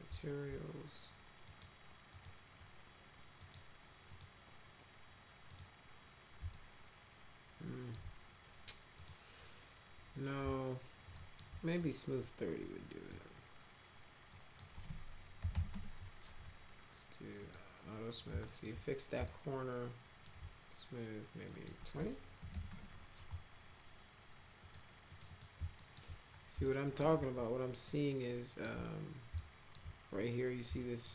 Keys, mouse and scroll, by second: 1.4 click, 2.1 click, 3.3 click, 4.0 click, 5.4 click, 6.5-7.9 alt+right drag, 8.9 click, 11.1 alt+middle click, 12.6 click, 14.3 click, 15.1-16.0 typing, 17.3 click, 18.4 alt+middle click, 19.2 alt+middle click, 21.4 click, 22.1-23.0 typing, 24.6 click, 25.0 click, 25.2 click, 25.7 alt+middle click, 26.6 alt+middle click, 27.1 alt+q, 27.8 alt+middle click, 29.3 alt+middle click, 30.8 alt+middle click.